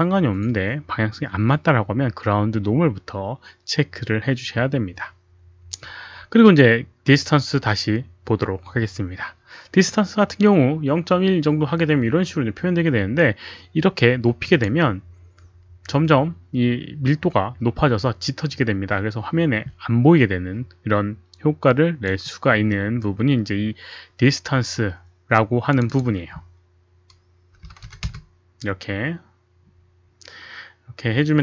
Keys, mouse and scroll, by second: 14.5 click, 25.3 click, 26.1 click, 27.8 KP_0, 28.0 Return, 29.3 click, 29.3 KP_1, 29.3 KP_Decimal, 29.3 KP_0.